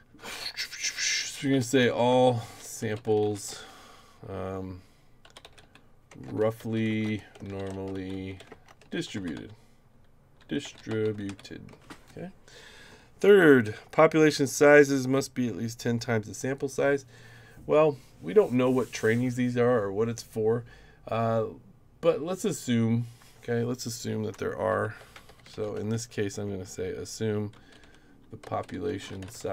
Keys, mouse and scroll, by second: 1.3-3.7 typing, 5.0-11.8 typing, 24.8-26.4 typing, 27.5-29.5 typing.